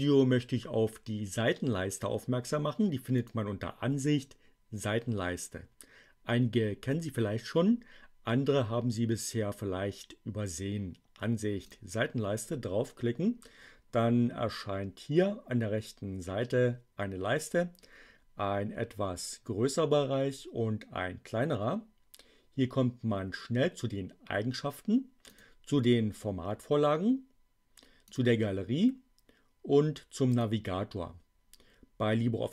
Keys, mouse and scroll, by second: 3.0 click, 11.5 click, 25.2 click, 27.9 click, 30.3 click.